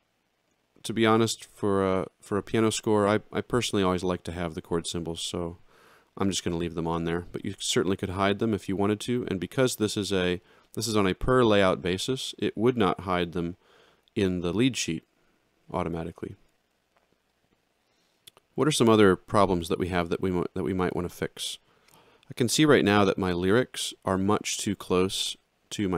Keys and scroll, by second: 5.0 ctrl+z.